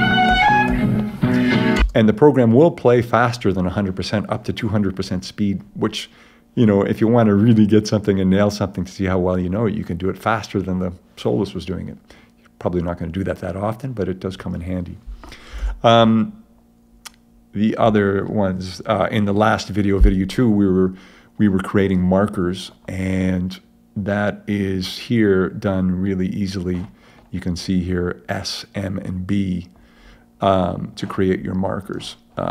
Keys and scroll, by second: 1.8 space, 15.6 super+Tab.